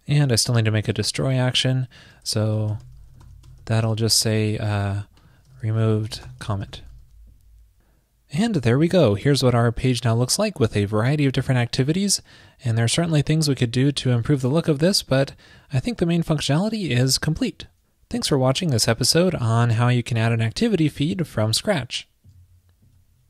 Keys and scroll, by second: 7.2 super+s.